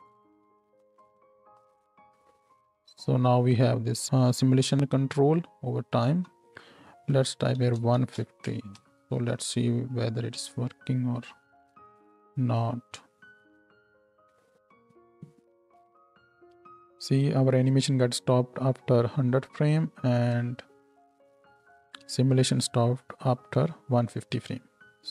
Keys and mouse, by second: 0.1-0.8 drag, 2.8 Tab, 2.8-8.4 drag, 2.8 n, 6.0-8.4 middle drag, 6.0-8.4 right drag, 8.7 shift+Left, 11.8 space, 16.6 space, 20.1 space, 22.0 space, 24.8 space.